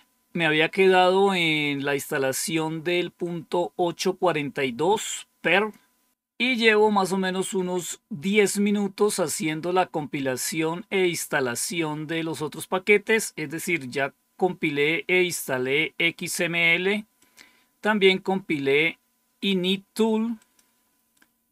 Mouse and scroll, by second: 13.0 click, 17.1 click, 20.3 click.